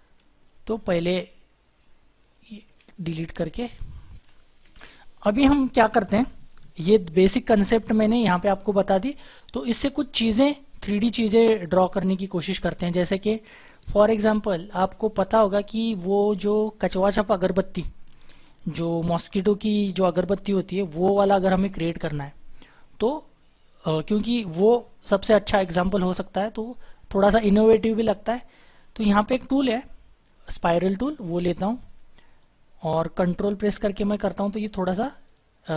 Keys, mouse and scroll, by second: 0.9 Delete, 2.7 Delete, 3.5 Delete, 4.2 Delete, 4.6 shift+F4, 32.4 ctrl+click.